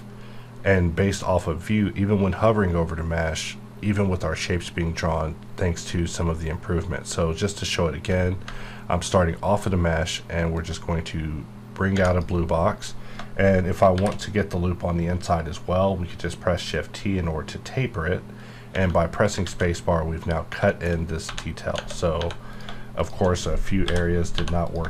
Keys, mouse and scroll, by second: 10.5-11.9 ctrl+drag, 11.9 Tab, 13.9 shift+t, 16.5 click, 16.9 scroll up 1, 19.4 alt+a, 20.7 shift+middle click, 21.0 shift+scroll up 2, 21.3 1, 21.8 Tab, 22.2 1, 22.5 click, 23.0 shift+click, 23.9 j, 24.3 j, 24.6 click.